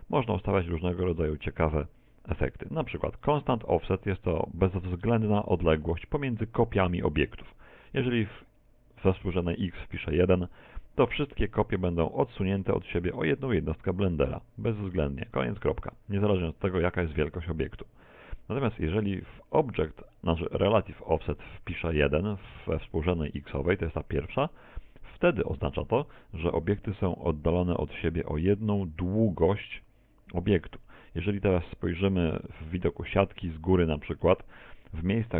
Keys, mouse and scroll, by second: 1.5 click, 7.7 click, 12.7 middle click, 19.3 click, 21.1 click, 31.4 middle click, 32.6 KP_1, 32.9 KP_7, 34.0 shift+middle click, 34.5 shift+middle click.